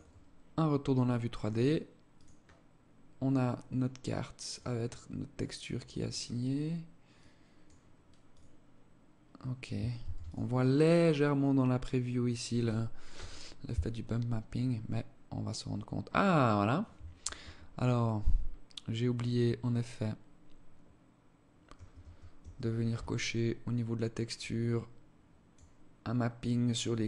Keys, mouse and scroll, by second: 1.7 click, 2.3-2.7 scroll up 4, 4.1 click, 4.7-5.8 scroll up 22, 5.9 scroll down 1, 6.7 click, 7.8 click, 9.6 ctrl+s, 22.0 Escape, 23.0-23.4 scroll down 4, 23.9 click, 26.0 click, 26.9 click.